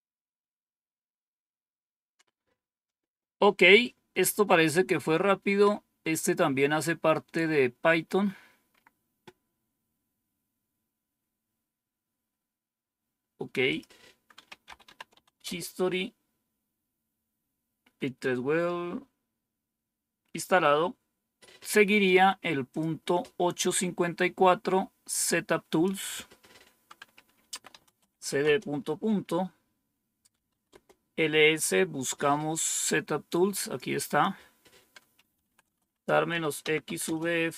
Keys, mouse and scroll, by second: 13.6 click, 14.1-15.2 typing, 15.3 Return, 22.6 click, 25.6 click, 27.2-28.5 typing, 30.0-30.9 typing, 33.1 click, 34.0 click, 34.8-36.7 typing.